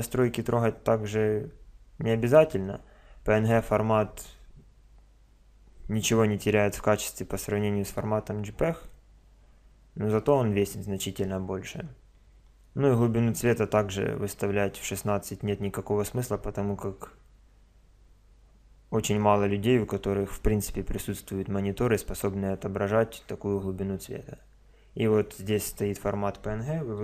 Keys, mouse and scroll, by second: 3.5 click.